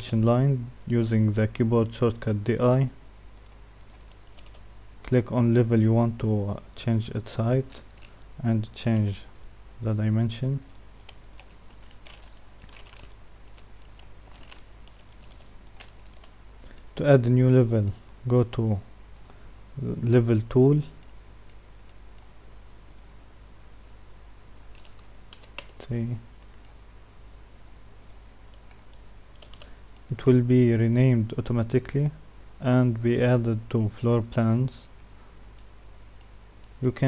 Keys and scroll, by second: 2.4 i.